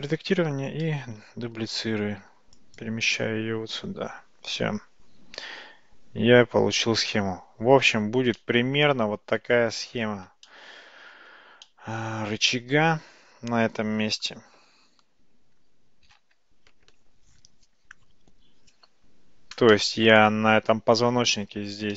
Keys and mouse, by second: 1.1 shift+d, 3.2-7.2 middle drag, 8.4-9.6 shift+middle drag, 10.6-11.4 shift+middle drag, 11.9-14.5 middle drag, 19.9-21.5 middle drag.